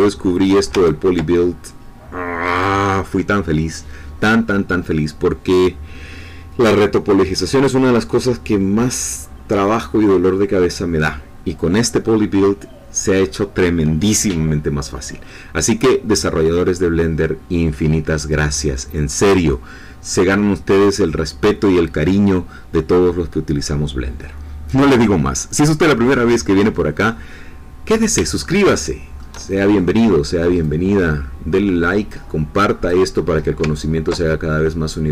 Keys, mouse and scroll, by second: 0.8-2.8 ctrl+drag, 28.7 shift+middle click, 30.6-33.2 drag, 33.8-35.1 ctrl+drag.